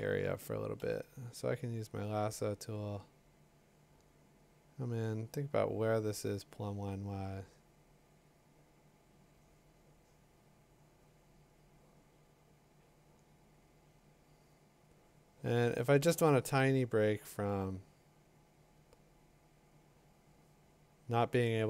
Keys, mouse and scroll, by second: 0.8 i, 8.0 click, 13.4 click, 15.1 click, 16.1 click, 17.9 click, 20.3 click, 21.4 click.